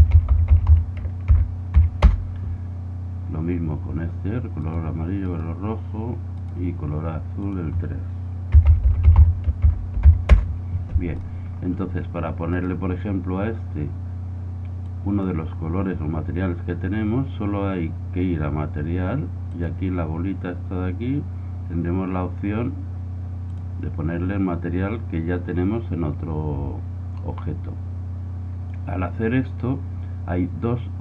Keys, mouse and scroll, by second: 4.6-8.3 right drag, 7.5-9.1 drag, 11.2-14.8 right drag, 12.6 middle click, 14.8-16.7 drag, 19.5-21.4 drag.